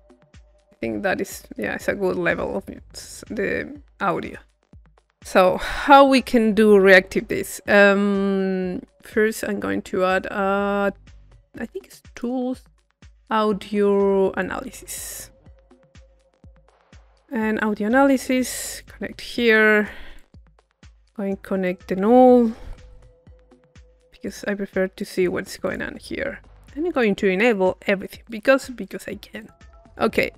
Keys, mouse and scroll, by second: 2.7 middle click, 4.7 click, 7.3-8.5 drag, 9.2 click, 9.7-11.6 middle drag, 12.1 click, 14.4-15.8 drag, 16.0 click, 16.8 middle click, 17.6-21.3 drag, 21.6 click, 22.0 Tab, 22.7 u, 23.3 click, 23.8-26.8 drag, 24.5 middle click, 26.9-30.3 drag.